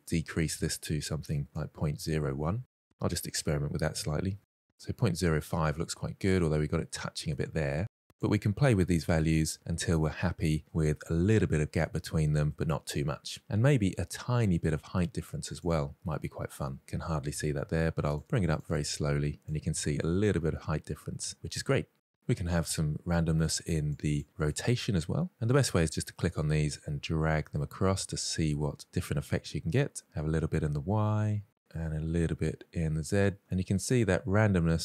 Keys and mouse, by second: 2.2-4.2 drag, 4.7-5.5 middle drag, 6.0-6.3 middle drag, 8.1-9.1 drag, 10.0-10.6 middle drag, 11.4-11.8 middle drag, 12.2 middle drag, 14.8 click, 15.3-16.6 middle drag, 17.6 click, 17.8 click, 17.9 click, 18.0 click, 18.1 click, 18.2 click, 18.6-19.4 drag, 19.6-23.5 middle drag, 23.5 click, 24.1-29.0 drag, 29.5-30.9 drag, 31.2-33.3 drag, 33.5-34.1 middle drag.